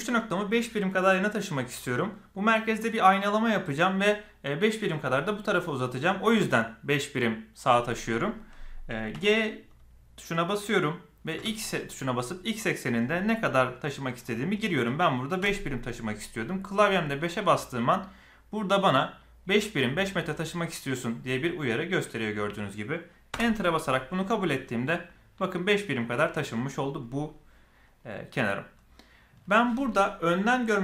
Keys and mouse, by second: 9.1 g.